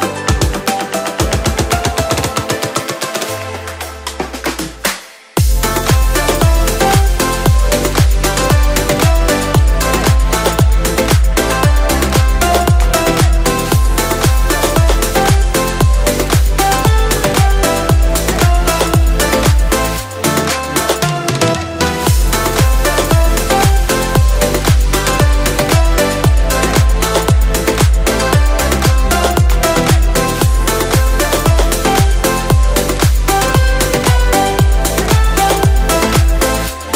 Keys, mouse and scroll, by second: 0.2-2.0 shift+middle drag, 5.4 click, 7.6-10.7 middle drag, 10.7 click, 11.4 click, 12.1 click, 12.7 click, 15.8 KP_7, 17.3 g, 20.7 click, 21.5 KP_1, 22.0 scroll up 2, 22.6-23.6 shift+middle drag, 23.6 shift+scroll down 2, 23.8-24.6 scroll up 3.